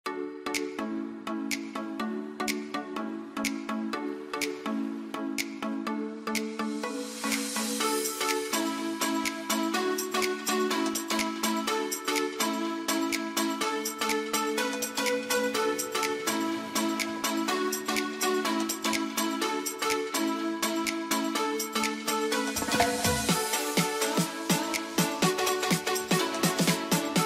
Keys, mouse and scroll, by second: 0.3 click, 2.3-2.6 typing, 3.7 End, 5.0 shift+F3, 5.8 click, 7.5 ctrl+space, 8.3-11.6 drag, 11.6 ctrl+right click, 12.0 ctrl+click, 12.6 ctrl+a, 19.0 ctrl+Num_Lock, 19.1 ctrl+space, 20.2 shift+click, 20.4 c, 21.0 F2, 21.3-25.3 drag.